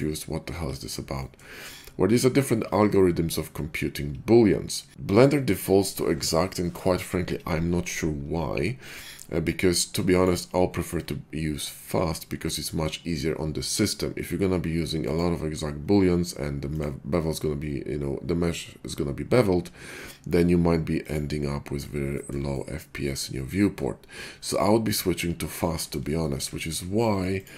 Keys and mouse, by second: 10.3-12.6 middle drag, 12.6-15.0 drag, 15.0 middle click, 15.1-20.9 drag, 21.8-22.4 shift+middle drag, 26.0-26.4 shift+middle drag, 27.4 click.